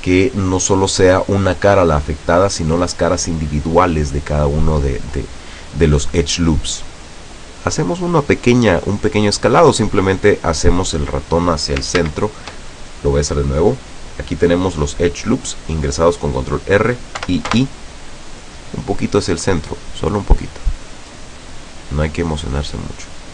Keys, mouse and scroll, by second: 12.1 ctrl+z, 17.3 i.